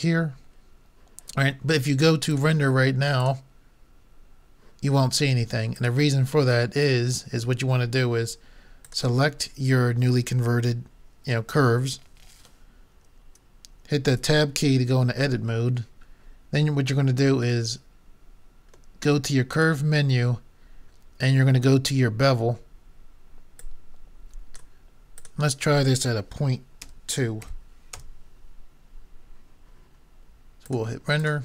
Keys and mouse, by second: 0.6 click, 2.3-3.4 drag, 8.9-10.6 drag, 8.9 typing, 14.4 Tab, 18.8 middle click, 19.6-21.5 drag, 23.6-27.1 drag, 30.7 click.